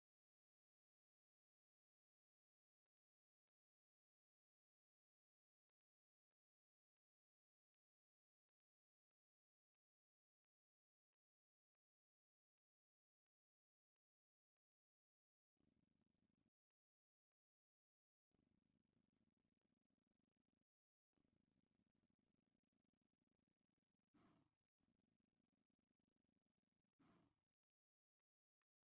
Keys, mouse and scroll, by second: 1.8 click, 3.3 ctrl+x, 4.3 ctrl+r, 5.1 right click, 7.2 ctrl+x, 7.7 ctrl+r, 8.6 right click, 9.8 alt+right click, 11.1 ctrl+x, 11.5 ctrl+r, 12.7 right click, 16.7 ctrl+x, 17.1 ctrl+r, 18.3 right click, 18.8 middle click, 20.0 middle click, 20.7 middle click, 21.7 z, 22.2 middle click, 22.7 z, 23.7-24.8 middle drag, 24.9 middle click, 26.4 middle click, 27.9 alt+click.